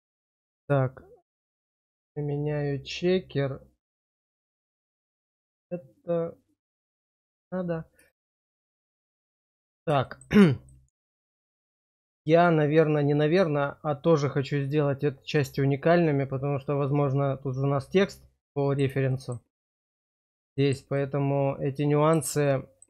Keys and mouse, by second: 1.2 click, 5.2 click, 6.6 click, 8.0 shift+middle click, 8.5 middle click, 9.0 shift+middle click, 10.0 shift+middle click, 10.5 click, 12.4-18.8 middle drag, 19.0 shift+middle click, 20.6 shift+middle click, 21.0-22.1 middle drag, 22.4 shift+middle click.